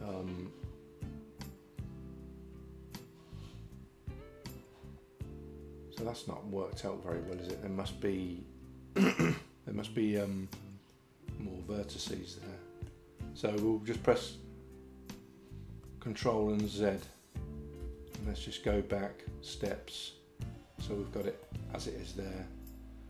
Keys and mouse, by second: 12.1 middle click, 17.4 ctrl+z, 17.8 ctrl+z, 18.3 ctrl+z, 18.7 ctrl+z, 19.6 ctrl+z, 21.5 middle click.